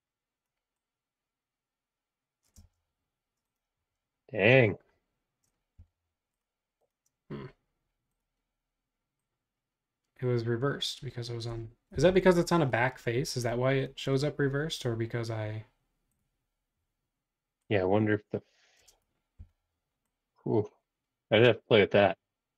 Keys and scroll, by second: 2.6 space, 5.7 b, 11.9 b, 19.4 v.